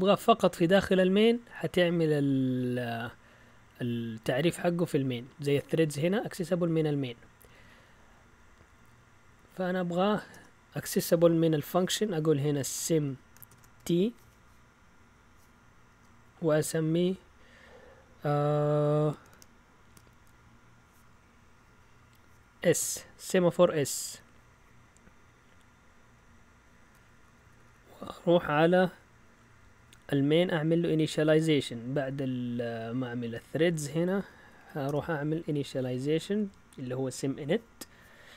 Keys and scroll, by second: 0.0-0.8 typing, 4.7 Down, 7.0-10.3 typing, 7.5 Up, 7.7 Up, 12.5-13.8 typing, 15.9 typing, 22.7 typing, 24.0 typing, 27.2 Down, 27.4-30.1 typing, 31.8 typing, 32.9 typing, 34.6 typing.